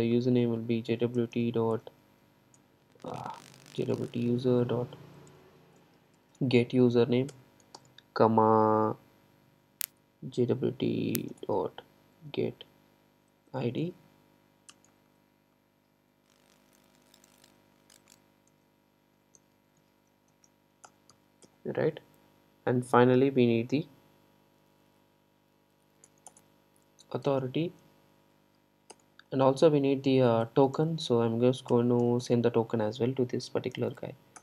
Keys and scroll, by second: 1.8 Return, 19.2 Return, 29.0 Return.